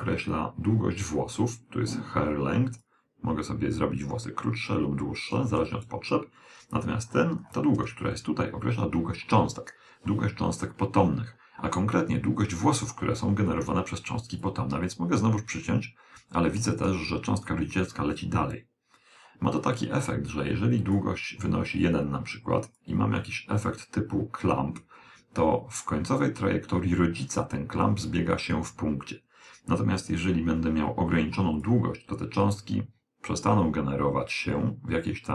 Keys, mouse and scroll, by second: 2.9 click, 7.1-9.5 middle drag, 14.5 click, 21.0 click, 22.9 click, 31.7 click.